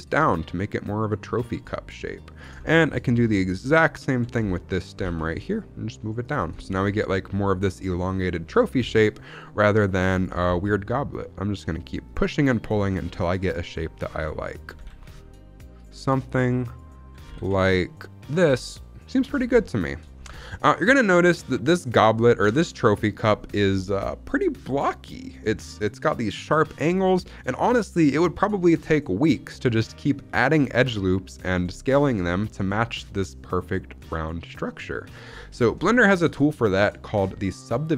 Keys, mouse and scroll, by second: 0.6 z, 2.3 click, 2.5 shift+middle click, 2.8-3.5 scroll up 3, 3.9 alt+click, 4.3-4.8 scroll down 2, 4.8 scroll down 1, 4.8 g, 4.9 z, 6.1 click, 6.3 scroll down 1, 6.5-7.9 shift+middle drag, 8.3 shift+middle click, 8.5 scroll up 1, 8.7 g, 8.8 z, 9.5 click, 10.1 alt+click, 10.3 g, 10.3 z, 12.0 click, 12.3 shift+middle click, 12.8-14.1 scroll up 3, 13.1 shift+middle click, 14.4 alt+click, 14.6 g, 14.8 z, 15.7 click, 16.6 alt+click, 17.1 g, 17.8 z, 18.9 click, 19.2 scroll down 2, 19.5 shift+middle click, 20.0 scroll down 1, 20.3 shift+middle click, 20.6-21.2 scroll up 2, 21.2 scroll down 1, 21.3-22.5 scroll down 1, 23.1 scroll up 2, 25.4 shift+middle click, 25.7-26.4 scroll down 1, 30.0-30.6 scroll up 1, 30.6-33.2 scroll up 1, 35.5-35.9 scroll down 3, 35.9 shift+middle click, 36.1-37.9 scroll up 2.